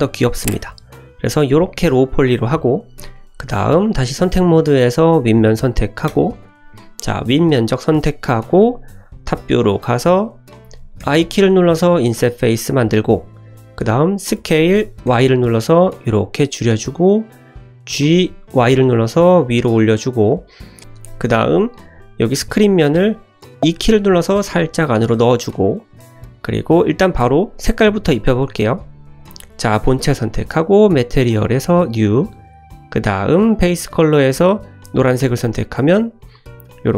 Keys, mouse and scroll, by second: 2.5 click, 3.1 middle click, 4.1 click, 5.0 click, 6.1 3, 6.3 click, 6.7 middle click, 7.0-7.7 scroll up 1, 7.7-8.1 scroll down 2, 8.1 middle click, 9.0 `, 9.9 shift+middle click, 10.2 scroll up 1, 11.0 scroll up 1, 11.0 i, 17.9 g, 20.8 Tab, 20.8 shift+middle click, 21.7 shift+middle click, 23.6 e, 26.1-26.6 scroll down 2, 27.0 click, 27.6 click, 28.1 click, 29.1 click, 30.5 click, 31.4 click, 33.5 click, 36.1 middle click.